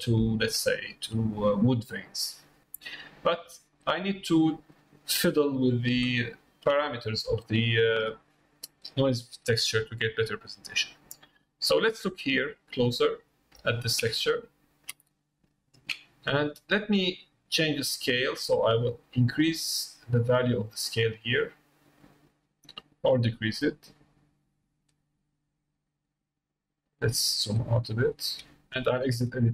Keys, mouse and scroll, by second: 0.0 middle click, 0.7 shift+middle click, 3.9 middle click, 4.8 middle click, 6.4 shift+middle click, 6.8 middle click, 7.5 shift+middle click, 13.1 middle click, 13.8 shift+middle click, 14.1 ctrl+middle click, 14.9 middle click, 15.5 shift+middle click, 17.9-25.4 drag, 27.7-28.7 drag.